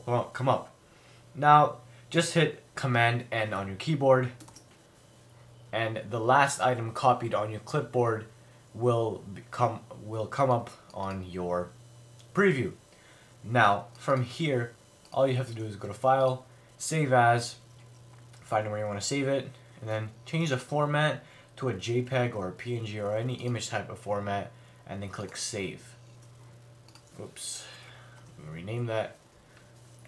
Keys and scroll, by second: 4.5 super+n, 27.6 Left, 28.2 Return.